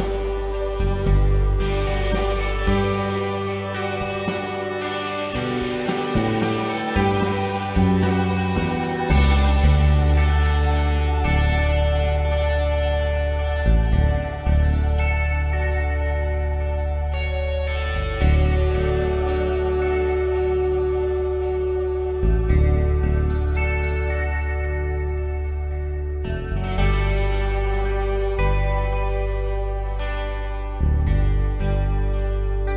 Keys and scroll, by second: 2.9 ctrl+shift+].